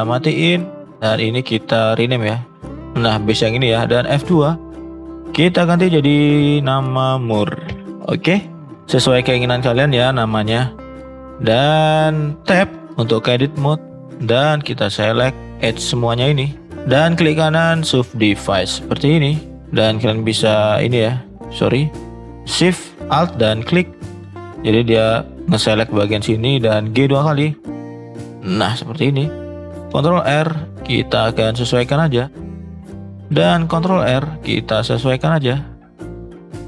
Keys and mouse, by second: 0.4 click, 4.3 F2, 12.6 Tab, 15.0 click, 15.6 click, 16.9-17.9 right drag, 20.2 alt+shift+click, 21.1-21.5 drag, 21.8 alt+shift+click, 27.2 g, 29.9 ctrl+r, 32.7 shift+middle click, 33.5 ctrl+r.